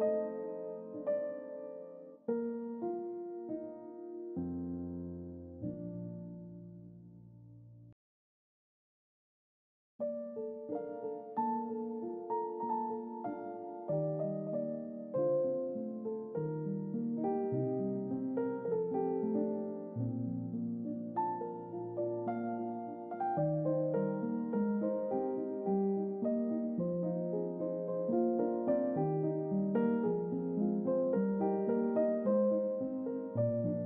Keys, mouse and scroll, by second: 4.1 click, 5.2 g, 11.3 click, 15.0 click, 23.3 click, 25.5 g, 26.5 click, 32.1 click, 32.8 click.